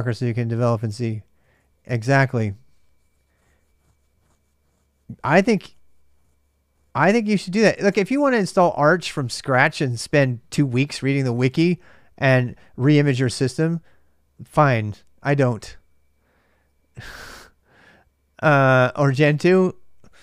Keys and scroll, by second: 0.9-1.9 typing, 19.5-20.2 typing.